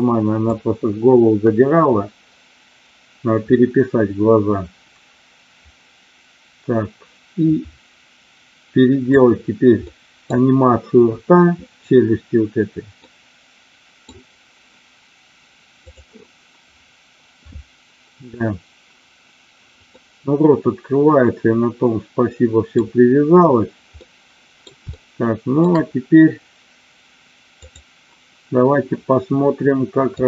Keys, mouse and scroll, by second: 0.5-9.1 drag, 9.8 middle click, 13.0 middle click, 15.8 click, 19.9-22.7 middle drag, 24.0-24.6 middle drag, 24.8-25.5 shift+middle drag, 27.5 click, 30.1 click.